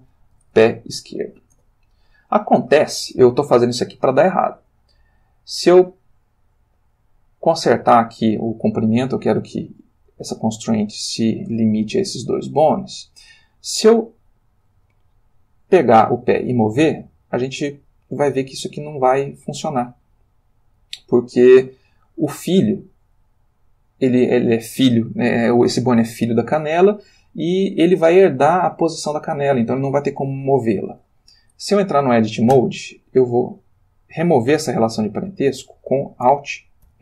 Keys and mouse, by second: 0.3 p, 0.4 e, 1.5 Return, 5.1 click, 5.9 click, 13.8 click, 16.4 g, 21.4 Escape, 32.5 Tab, 34.2 g, 35.0 Escape, 36.9 alt+p.